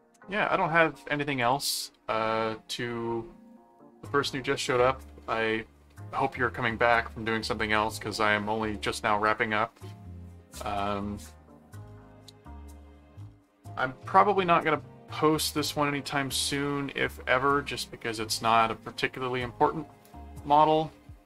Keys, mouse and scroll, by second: 1.4 click.